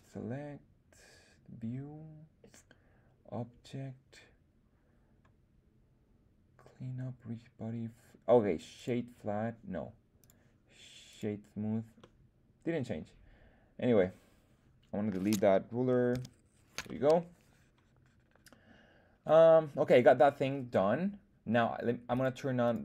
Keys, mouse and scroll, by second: 11.9-14.1 middle drag, 16.1 x, 16.8-20.4 middle drag, 22.1 click, 22.6 click.